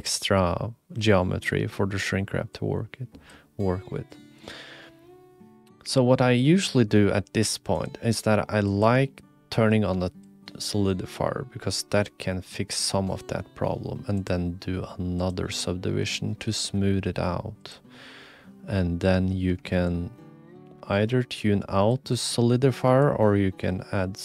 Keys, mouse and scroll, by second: 2.5 click, 3.8-4.4 drag, 7.7-8.8 drag, 10.2-12.9 shift+drag, 14.2-15.3 drag, 17.7 click, 19.8-21.9 shift+drag, 23.1-24.2 shift+drag.